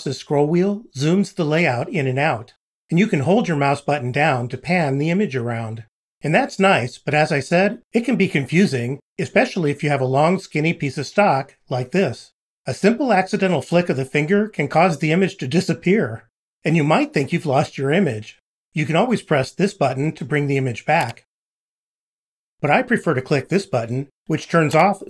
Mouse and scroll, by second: 4.6-5.8 drag, 15.0 scroll up 2.